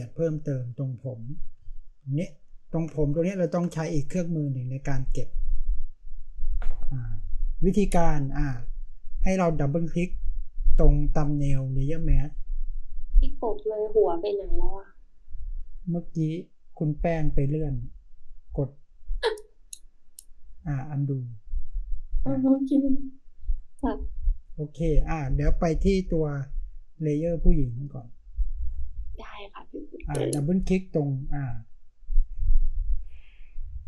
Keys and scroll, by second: 1.4 space.